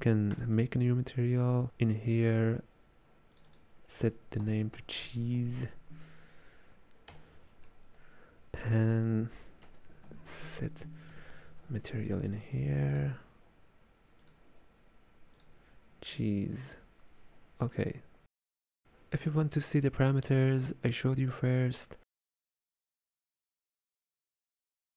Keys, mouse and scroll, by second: 0.4-2.6 drag, 3.4 click, 3.5-5.2 drag, 5.2 e, 9.7 space, 15.4-17.8 drag, 17.8-18.8 middle drag, 22.9 alt+F11.